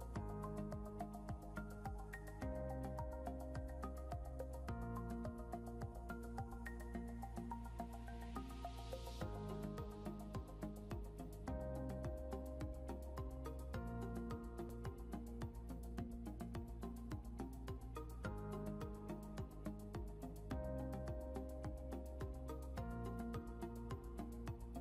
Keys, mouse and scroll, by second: 2.9-8.2 typing, 10.3 typing, 14.2-19.2 typing, 22.1 typing.